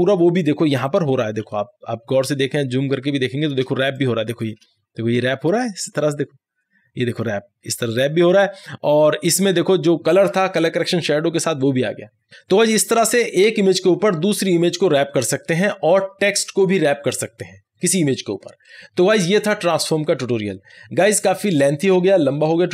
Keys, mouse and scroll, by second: 1.1 click, 1.5 ctrl+=, 3.7 space, 4.1 click, 4.2 space.